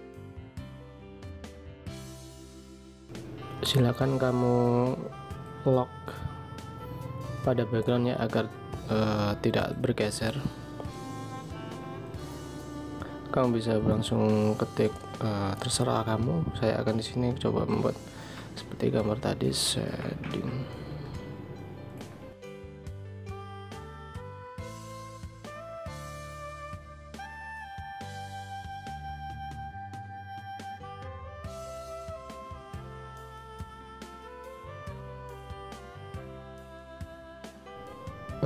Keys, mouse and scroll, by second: 19.2 shift+s, 20.1 h, 20.5 a, 24.2 shift+click, 28.1 alt+shift+click.